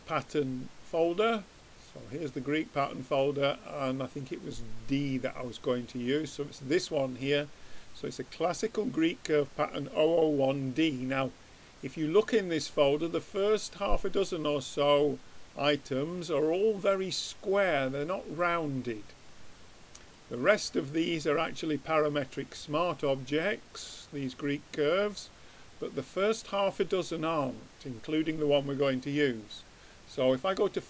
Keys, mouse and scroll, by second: 1.5-3.1 drag, 3.5-5.3 drag, 10.8-12.7 drag, 25.0-26.7 middle drag, 26.7-28.6 drag, 29.4-30.8 drag.